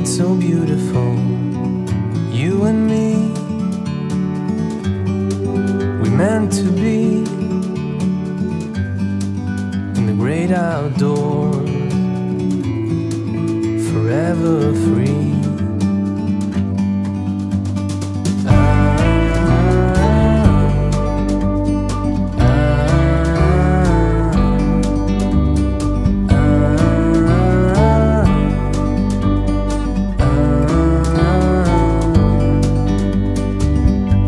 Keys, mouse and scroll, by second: 5.4 shift+click, 5.6 right click, 6.4 click, 10.1 click, 12.7 click, 15.4 click, 19.8 click, 20.9-22.2 scroll up 1, 22.2-23.0 scroll down 1, 26.1 click, 28.0 click, 29.3 click.